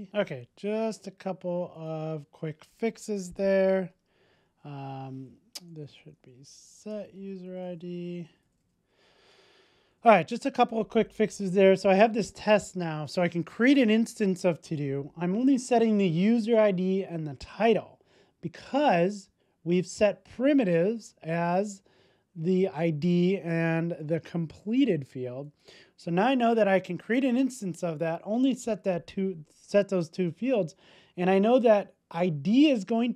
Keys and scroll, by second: 0.1 super+s, 9.2 super+s.